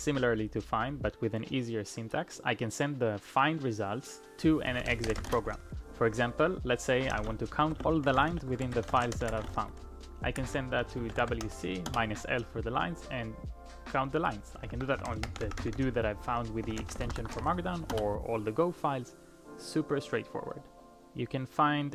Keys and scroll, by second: 4.4-5.7 typing, 6.8-11.9 typing, 14.7 ctrl+p, 14.7-17.9 typing.